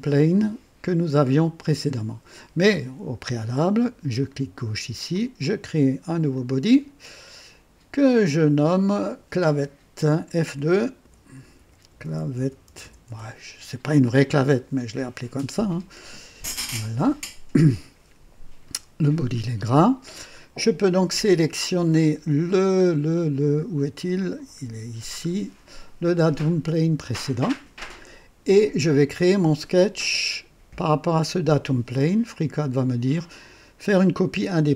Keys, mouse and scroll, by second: 4.1 click, 5.1 click, 6.3-6.9 drag, 8.3 click, 11.0 F2, 11.1-13.5 typing, 16.4 Return, 22.0 scroll up 2, 22.9 scroll down 2, 24.1 click, 24.6 scroll down 2, 27.0 click, 32.2 click.